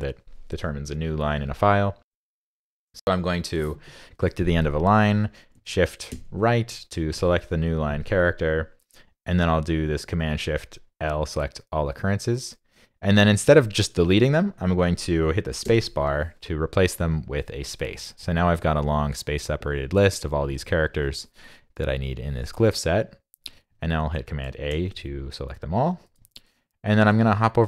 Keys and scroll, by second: 11.2 shift+super+l, 23.7 super+a, 24.7 super+c, 26.2 super+Tab, 27.2 super+Tab, 27.5 super+Tab.